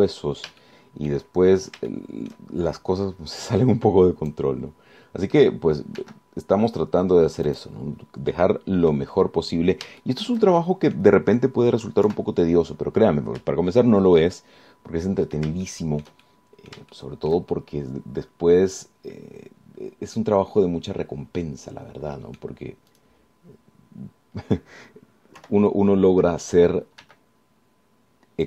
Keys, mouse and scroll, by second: 1.8 shift+click, 3.1 shift+click, 4.6-5.7 drag, 7.2 g, 8.7 click, 9.1 scroll down 1, 9.5 click, 11.2 shift+click, 11.8 shift+click, 13.3 KP_1, 14.0-14.4 scroll down 1, 15.5-16.7 shift+middle drag, 16.9-23.8 shift+middle drag, 24.1 click, 26.6 KP_1, 28.2 g.